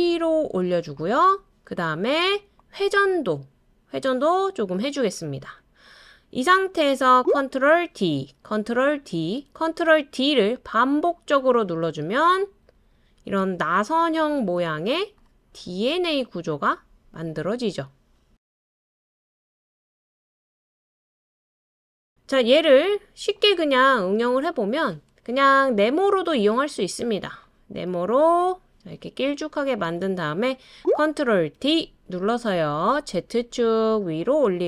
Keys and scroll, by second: 7.9 super+d, 9.0 super+d, 10.1 super+d, 10.5 super+d, 10.9 super+d, 31.5 super+d.